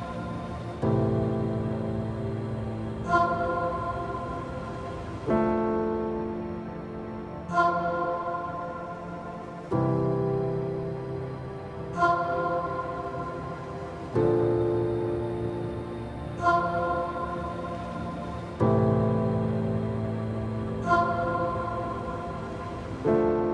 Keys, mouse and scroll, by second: 12.2 click, 16.6 click, 19.0 click.